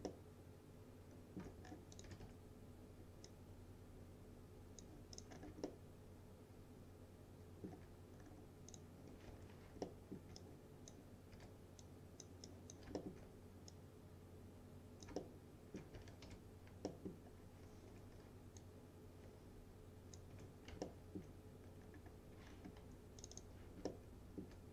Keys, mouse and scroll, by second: 0.1-1.7 alt+middle drag, 1.7 scroll up 1, 1.9-2.8 typing, 2.0 click, 3.3-4.9 drag, 5.4 scroll down 1, 5.7-7.9 alt+middle drag, 8.2-8.8 scroll up 1, 8.8 click, 9.4 1, 9.9 alt+middle click, 10.4-11.1 click, 11.4 w, 11.9-12.5 click, 13.0 alt+middle click, 13.8-15.9 drag, 15.2 alt+middle click, 15.8-16.8 typing, 16.9 middle click, 17.3 scroll down 1, 18.0 F3, 18.6-20.5 drag, 20.4 F3, 20.9-21.5 alt+middle click, 21.7 scroll down 1, 22.5 scroll up 1, 22.8 2, 23.3 click, 23.5-23.9 scroll up 1, 23.9-24.6 alt+middle click.